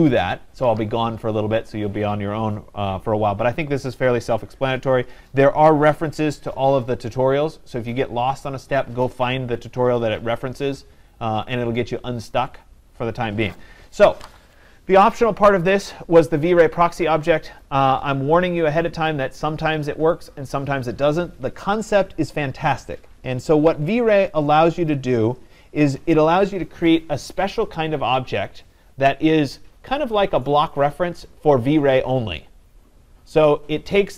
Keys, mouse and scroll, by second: 17.6 click, 19.1 click, 20.3 click.